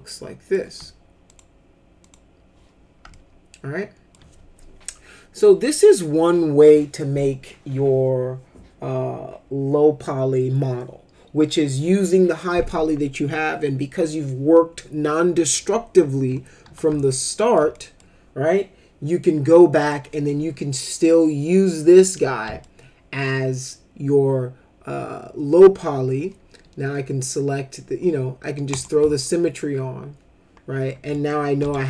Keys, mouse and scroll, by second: 1.2 click, 2.0 click, 3.1 alt+middle click, 17.1 alt+middle click, 17.7 middle click, 19.8 click, 22.6-25.5 alt+middle drag, 28.7 click, 29.2-30.9 alt+middle drag, 31.1 middle click, 31.6 F4, 31.6 click.